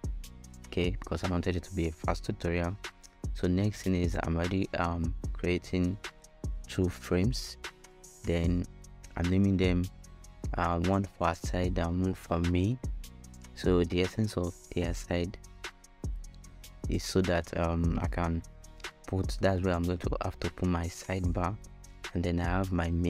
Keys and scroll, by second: 5.2-6.9 typing, 8.3-9.4 typing.